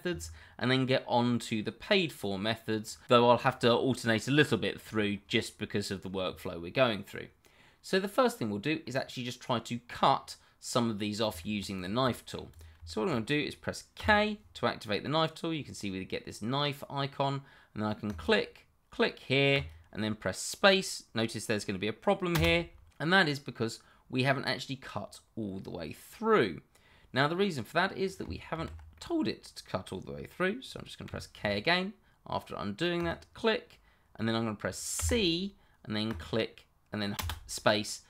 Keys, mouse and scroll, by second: 0.8-1.3 scroll up 1, 1.3 middle click, 5.3 middle click, 10.1 middle click, 11.4 shift+middle click, 11.4 middle click, 12.3 shift+middle click, 12.9 middle click, 13.0 shift+middle click, 14.0 k, 15.9 scroll up 1, 18.0 click, 22.3 space, 23.0 middle click, 28.5 ctrl+z, 28.9 middle click, 31.0 k, 32.9 click, 34.9 c, 36.0 click, 37.1 space, 37.8 middle click.